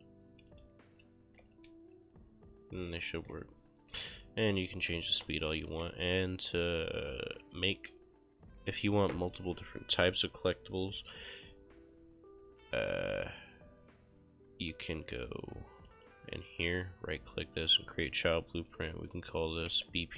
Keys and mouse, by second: 0.0 click, 0.6 right click, 0.8-4.2 typing, 4.7 Escape, 5.2 right click, 5.3 d, 5.7 ctrl+space, 6.1 click, 15.9 click, 16.5 right click, 17.5 click, 19.6-20.1 typing.